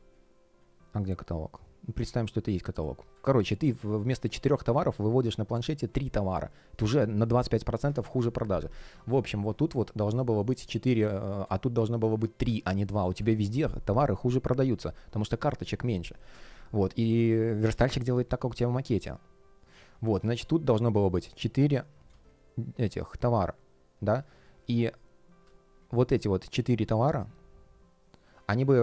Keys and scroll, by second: 5.8 space, 9.6 shift+p, 10.5 space, 16.2 space, 22.0 space, 25.3 space.